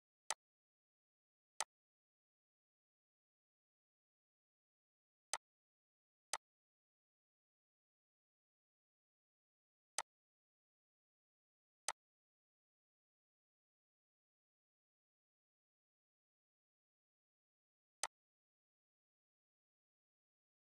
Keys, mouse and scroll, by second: 0.2 click, 5.3-10.0 drag, 6.6 typing, 13.0 typing, 13.9 scroll, 15.4 click, 18.0-19.4 drag, 19.4 right click.